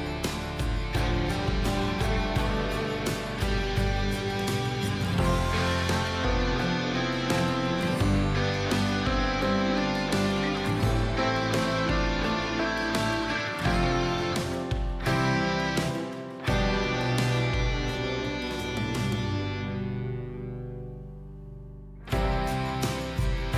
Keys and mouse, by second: 0.9 click, 2.3 click, 3.4-6.0 drag, 7.5 click, 9.7-11.4 drag, 15.1 click, 15.4 click, 18.8 click, 22.8 click.